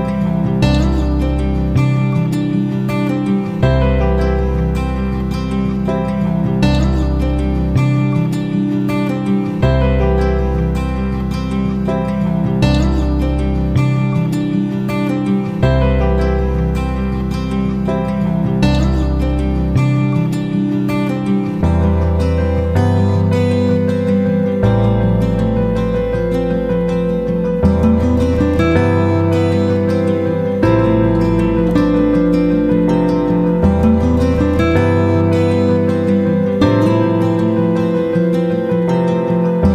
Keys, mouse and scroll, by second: 8.6 ctrl+m, 15.4 click, 19.5-20.7 scroll down 1, 23.1 click, 30.5-33.3 typing, 34.4 click, 35.3 click, 37.2-38.2 typing, 39.4 click.